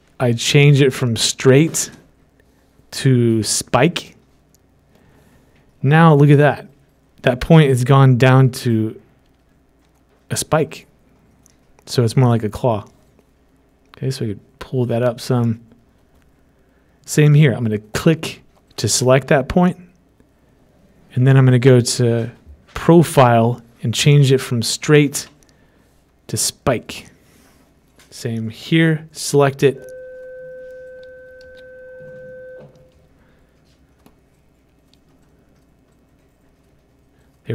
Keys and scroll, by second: 32.0 ctrl+z.